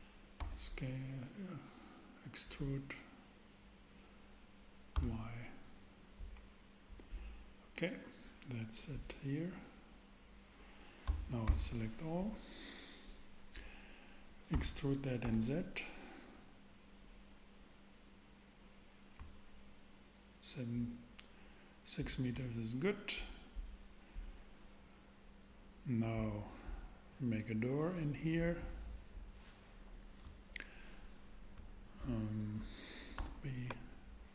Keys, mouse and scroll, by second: 0.4 e, 0.9 e, 4.9 y, 11.0 a, 11.5 a, 14.5 e, 14.7 e, 15.2 z, 19.2 Up, 33.1 super+b.